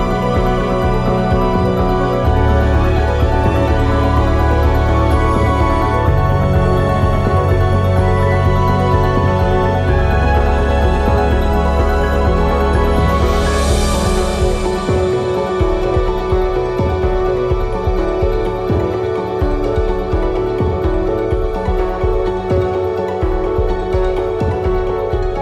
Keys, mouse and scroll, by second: 1.8 alt+click, 4.6-9.8 middle drag, 9.8 alt+shift+click, 12.8-22.2 middle drag, 15.5 KP_0, 17.1 g, 20.7 KP_0, 22.2 click.